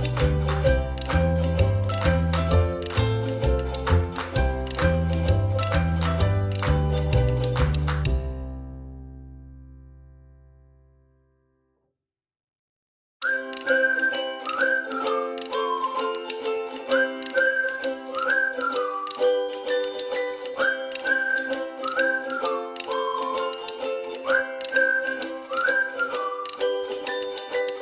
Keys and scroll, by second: 0.1 space, 2.6 space, 3.9 ctrl+z, 8.1 space, 9.4 o, 12.3 ctrl+j, 12.7 space, 21.8 o, 24.5 ctrl+j, 25.4 o.